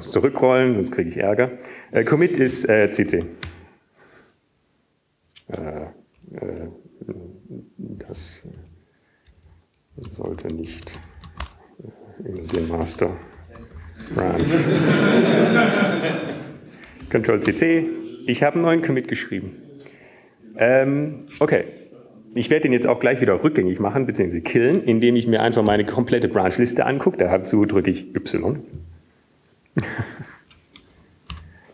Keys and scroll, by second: 6.7-7.2 typing, 11.7-13.2 typing, 14.4-15.5 typing, 16.8-18.0 typing, 20.3-21.0 typing, 29.4 y.